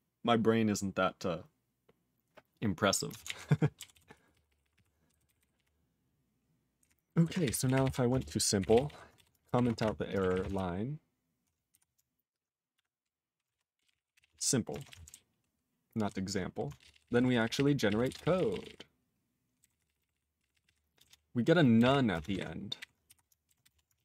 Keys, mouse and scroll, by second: 3.2 ctrl+alt+f, 3.9 ctrl+s, 4.1 ctrl+p, 4.3 ctrl+p, 4.5 ctrl+p, 4.6 ctrl+p, 4.7 ctrl+p, 5.1 ctrl+n, 5.4 ctrl+n, 5.5 ctrl+p, 6.8 ctrl+e, 8.2 ctrl+Return, 8.6 ctrl+n, 8.6 ctrl+a, 8.8 ctrl+n, 8.8 ctrl+n, 9.1 ;, 9.6 space, 9.6 ctrl+s, 11.7 q, 12.7 F5, 13.5 ctrl+BackSpace, 13.5-14.7 typing, 23.0 q, 23.7 Return, 23.9 ctrl+a.